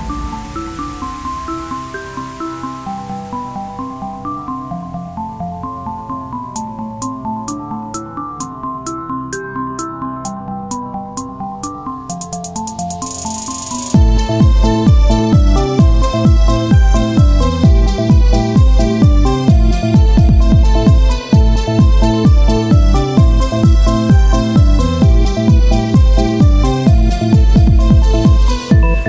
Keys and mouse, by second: 0.8 Tab, 4.1 Tab, 4.1-8.2 drag, 4.8 ctrl+z, 7.4 right click, 8.2 Tab, 11.4 click, 12.8-14.0 drag, 13.7 KP_1, 16.6 middle click, 16.9 click, 17.6 Tab, 18.2 ctrl+Tab, 20.8 ctrl+r, 21.8-23.0 drag, 23.6 z, 24.1 c, 25.3 z, 27.6 p, 28.5 Tab, 28.7-29.0 drag.